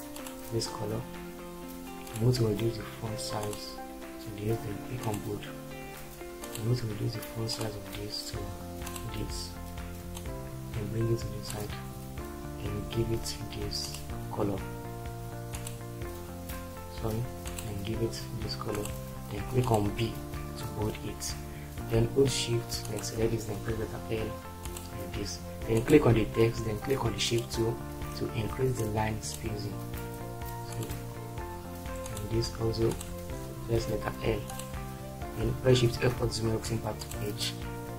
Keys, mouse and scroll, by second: 23.7 shift+l, 33.7 shift+l, 35.9 shift+F4.